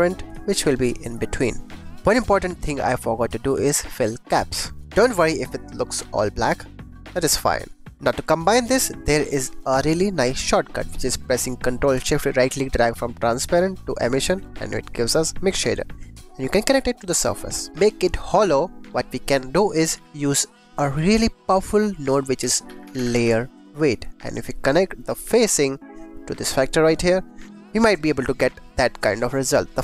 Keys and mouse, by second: 0.9 click, 1.6 click, 2.2 click, 4.7 click, 6.6 click, 7.4 click, 7.8 g, 8.0 click, 8.7 click, 10.1 click, 12.4 ctrl+shift+click, 14.7 click, 15.1 click, 16.3 click, 17.6 click, 19.4 click, 19.9 shift+a, 25.1-26.9 drag, 27.3 click, 28.1 shift+click, 28.8 shift+click.